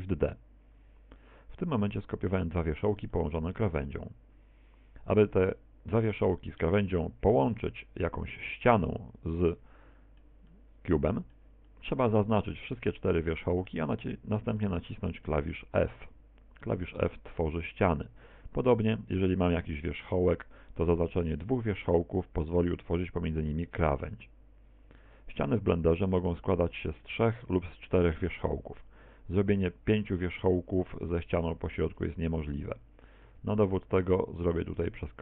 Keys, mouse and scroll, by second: 1.1 middle click, 3.1 middle click, 7.6 right click, 8.2 shift+right click, 8.9 middle click, 9.5 middle click, 10.5 middle click, 11.7 middle click, 12.8 shift+right click, 13.3 shift+right click, 13.9 middle click, 16.1 f, 17.1 middle click, 18.6 right click, 19.6 shift+d, 20.3 click, 20.5 f, 25.0 right click, 25.8 shift+right click, 26.3 shift+right click, 27.2 f, 27.7 middle click, 29.9 a, 30.3 middle click, 31.8 right click, 32.3 shift+d, 33.2 click, 33.5 shift+d, 34.0 shift+click, 34.3 shift+d, 34.8 click, 34.9 shift+d.